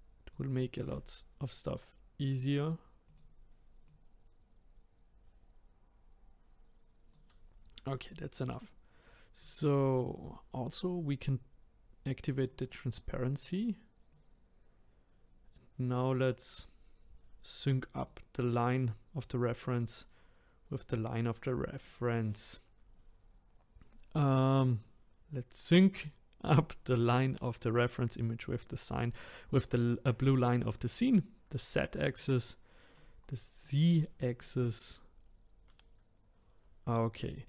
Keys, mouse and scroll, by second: 0.8 s, 3.8 click, 9.4 click, 12.5 click, 14.1 click, 32.1-33.2 middle drag, 33.2-33.6 scroll down 4, 33.6-37.4 middle drag.